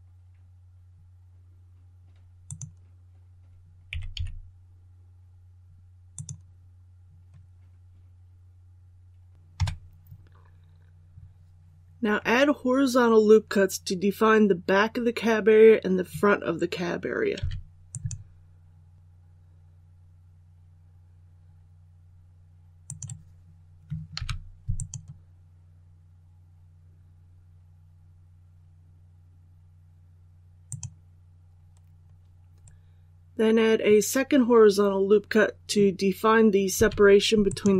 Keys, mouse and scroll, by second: 2.3-3.4 drag, 3.8 typing, 6.0 click, 9.4 KP_7, 17.8-23.8 drag, 24.7 click, 37.4 click.